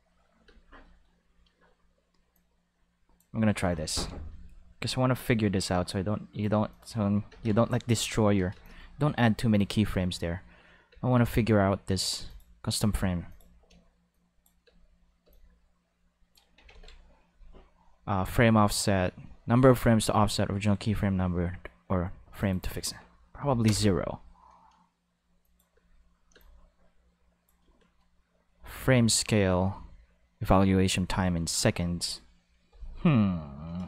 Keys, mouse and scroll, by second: 0.5 space, 0.8-1.5 middle drag, 2.3-3.8 drag, 3.8 alt+a, 4.3 b, 5.2-6.4 drag, 6.5 x, 6.7 click, 7.3 ctrl+s, 7.7 click, 8.2 space, 8.5 space, 8.6-9.6 drag, 10.9 space, 11.2 space, 12.3 click, 12.8 click, 13.0 2, 13.3 click, 14.1 click, 14.6 space, 15.2 space, 15.3-16.7 drag, 16.7 ctrl+s, 22.4-25.2 drag, 23.4 o, 23.7 Return, 25.4 click, 25.7 space, 26.3 space, 26.4 click, 31.5 click.